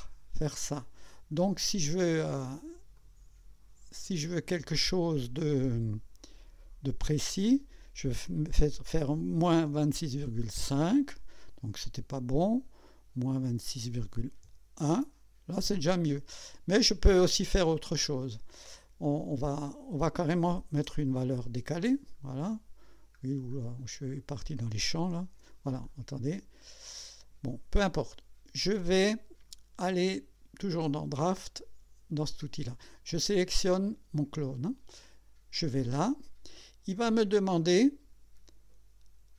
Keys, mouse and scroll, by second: 3.0 click, 6.4 click, 9.2 KP_Subtract, 9.7 KP_2, 9.9 KP_6, 10.2 KP_Decimal, 10.4 KP_5, 13.6 BackSpace, 14.5 KP_1, 20.6 BackSpace, 21.3 KP_4, 22.4-23.6 scroll down 6, 23.7-24.9 scroll up 2, 25.1 ctrl+z, 25.9 scroll up 2, 33.8 click, 34.4 click, 35.6 click.